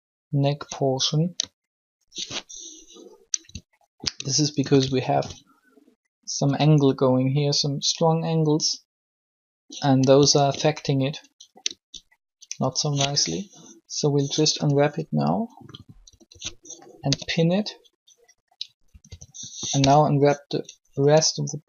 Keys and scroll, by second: 14.4 u, 16.0-17.0 typing, 18.9-19.6 typing.